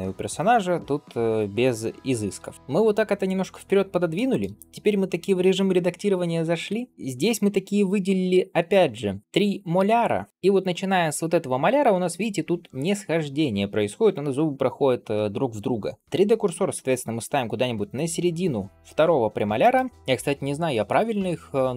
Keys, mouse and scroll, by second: 2.5 ctrl+s, 4.0 shift+middle click, 6.5 Tab, 6.9 click, 9.2 l, 19.4 shift+right click.